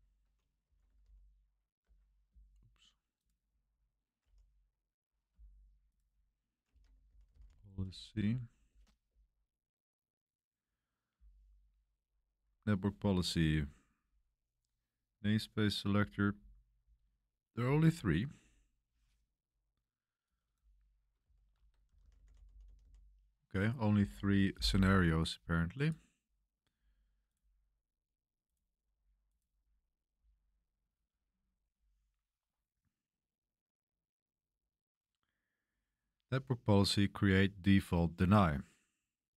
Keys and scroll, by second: 0.6-1.5 typing, 1.8 Return, 4.2 super+t, 6.6-7.9 typing, 8.6 Return, 9.0 Return, 21.2-23.3 typing, 23.9 Return.